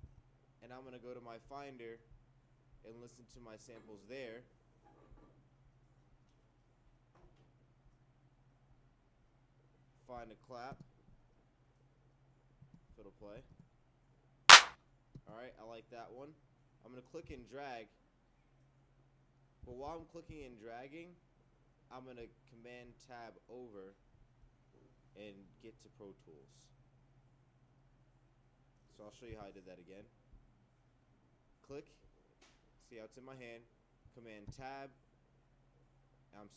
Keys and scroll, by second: 0.0 super+Tab, 12.9 Down, 17.3 super+Tab, 19.9 super+`, 29.3 super+Tab, 34.5 super+Tab.